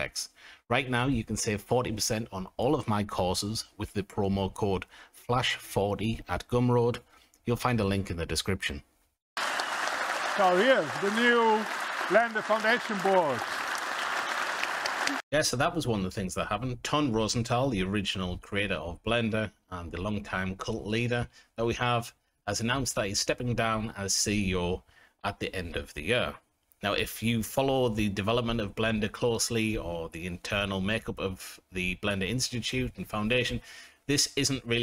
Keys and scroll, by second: 0.2 g, 0.3 z, 7.0 s, 7.8 a, 8.4 KP_0.